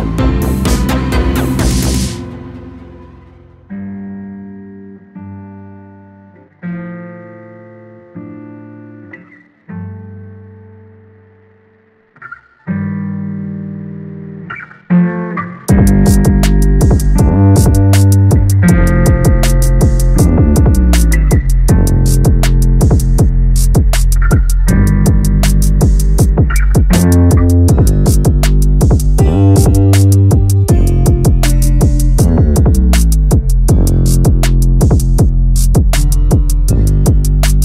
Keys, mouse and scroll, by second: 0.7 a, 0.9 a, 1.2 Tab, 1.8 Tab, 2.2 a, 2.9 alt+n, 3.9 a, 4.1 a, 4.5 Tab, 4.9-5.2 scroll down 3, 5.2-7.0 middle drag, 7.0 ctrl+3, 7.5-7.9 scroll up 1, 7.9-11.2 middle drag, 11.2 KP_7, 12.6 g, 14.3-15.9 middle drag, 15.9 Tab, 16.3 2, 16.5 click, 16.7 click, 17.3 g, 18.3 a, 18.5 a, 18.9 middle click, 19.4 scroll up 1, 19.7 Tab, 20.9-22.6 right drag, 26.3-26.9 scroll up 1, 26.9-29.3 middle drag, 29.3 click, 30.4-33.1 shift+drag, 33.1-33.6 scroll down 1, 34.5-35.7 drag, 35.7 ctrl+z, 36.9 click, 37.4-37.6 drag.